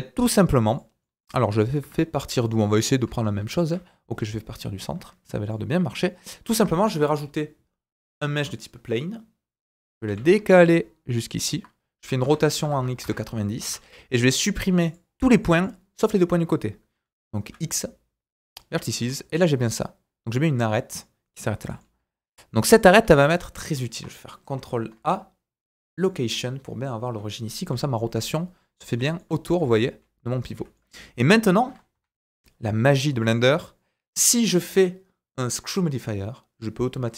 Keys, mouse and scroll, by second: 6.0-10.5 right drag, 6.8 shift+a, 10.0 g, 10.5-11.6 ctrl+drag, 11.6-13.6 right drag, 12.2 r, 13.6 Tab, 13.6-14.9 drag, 15.4 click, 17.4 x, 19.0 Tab, 21.6 g, 22.0 g, 23.0-24.0 right drag, 24.0 ctrl+click, 24.5 ctrl+a, 25.0-30.7 right drag, 29.0-29.6 typing, 29.2 middle click, 30.7 middle click, 31.9 KP_1, 33.2 click, 35.6-37.1 drag.